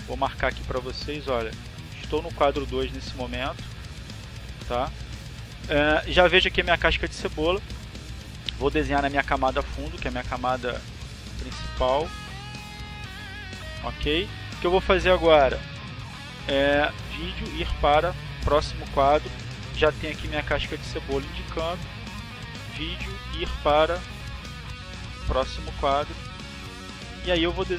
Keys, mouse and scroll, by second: 0.9-2.2 drag, 4.0 click, 10.5 click, 11.9 click, 16.4 click, 18.1 click, 20.8 click, 22.4 click, 25.0 click, 26.1-27.1 drag.